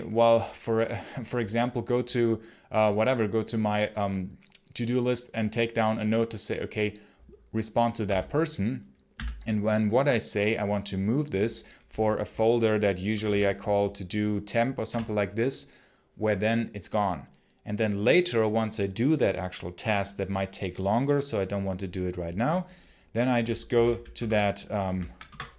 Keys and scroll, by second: 7.9 x, 9.0 v, 12.7-13.6 typing, 14.7 Return, 23.3-24.6 typing, 25.1 Return.